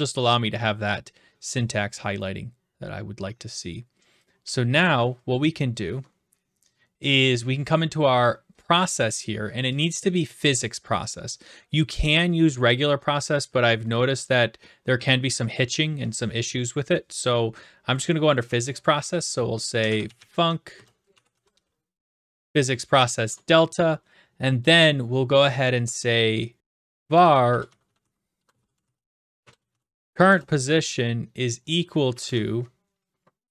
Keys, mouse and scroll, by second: 4.8 click, 10.6 click, 19.5-22.0 typing, 22.3 Tab, 23.2 Return, 26.3-29.4 typing, 32.1 typing, 33.4-33.5 typing.